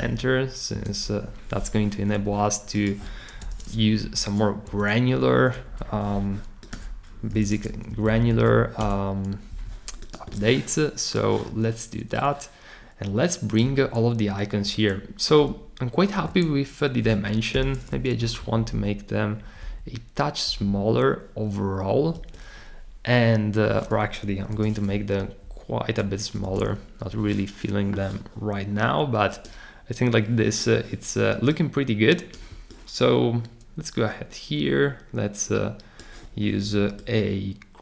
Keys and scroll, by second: 0.1 Up, 0.7 Return, 3.4 super+k, 4.0 shift+Down, 4.6 Return, 7.3 super+k, 7.9 Down, 8.0 Down, 8.2 Down, 8.3 Down, 8.5 Down, 8.8 Return, 8.9-9.7 typing, 17.5 super+k, 18.2 Down, 18.3-19.6 typing, 20.5 Down, 22.2 Return, 24.6 super+k, 25.2 shift+Down, 26.4 Return.